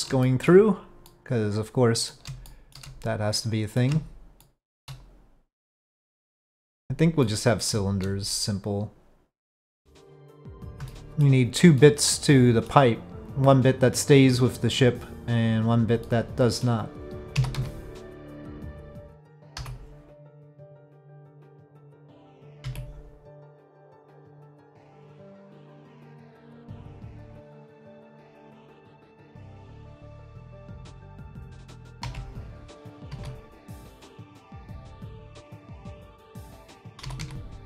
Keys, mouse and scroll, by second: 0.2 shift+middle click, 1.0-2.1 middle drag, 2.4 shift+middle click, 3.3 middle click, 4.4 shift+middle click, 5.7 middle click, 7.2 middle click, 9.5 Tab, 10.0 middle drag, 10.9 shift+middle drag, 11.8-12.8 middle drag, 14.2-15.7 drag, 16.0 middle click, 17.3 s, 18.7 ctrl+z, 19.0 3, 19.6 i, 22.6 e, 24.9 ctrl+z, 27.4 click, 28.3 3, 29.0 alt+click, 30.2 alt+click, 32.0 e, 33.1 s, 37.0 s.